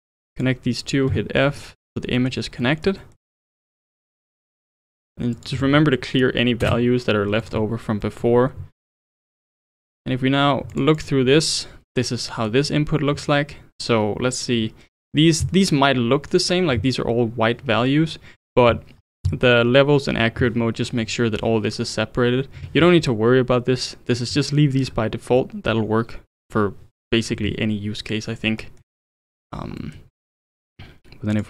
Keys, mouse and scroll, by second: 0.3 shift+click, 1.1 f, 1.4-3.2 middle drag, 3.2-4.0 scroll down 3, 4.0-4.7 drag, 5.3-7.5 drag, 8.0-9.7 middle drag, 9.7 ctrl+shift+click, 10.7 ctrl+shift+click, 11.0 ctrl+shift+click, 12.3-15.4 middle drag, 28.3-28.6 scroll up 1, 28.6-30.1 middle drag, 30.1-31.3 scroll down 2, 31.3-31.4 drag.